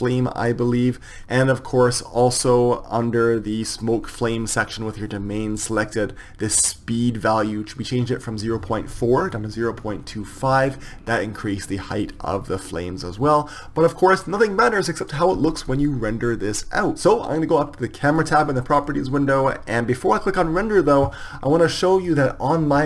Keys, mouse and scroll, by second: 1.1-5.1 drag, 18.6-21.5 drag.